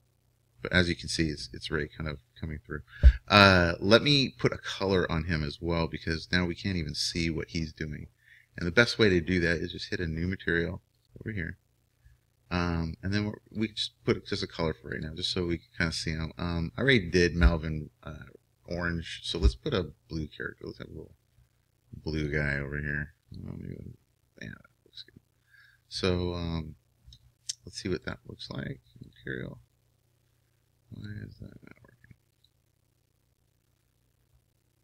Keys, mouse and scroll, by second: 5.6-11.3 right drag, 11.3-16.9 drag, 29.0-33.3 drag.